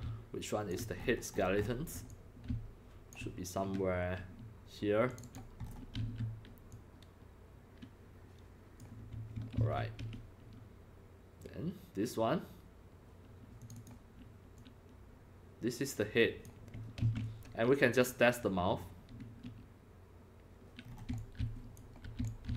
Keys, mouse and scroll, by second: 0.7 c, 1.0 scroll up 6, 1.2 scroll, 1.3-1.9 scroll up 13, 1.9-3.8 typing, 2.1-3.1 drag, 5.1 click, 5.2 click, 5.6-6.0 scroll down 5, 6.0 e, 6.0 e, 6.7-8.8 drag, 9.5 ctrl+z, 13.6 click, 13.8 click, 14.6-16.4 drag, 17.0 ctrl+z, 20.8-22.5 typing, 20.8 scroll down 4, 21.2 click, 22.3 click.